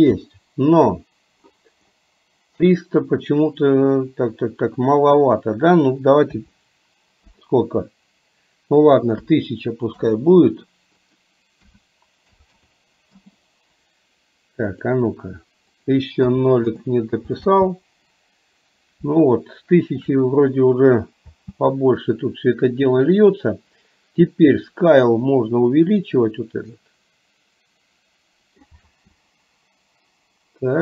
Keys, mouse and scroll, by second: 4.9-10.1 drag, 11.1-13.2 drag, 12.6 KP_0, 14.8-16.8 drag, 17.4 space, 19.3-20.2 shift+middle drag, 21.4 space, 25.6-28.7 drag, 28.9 space.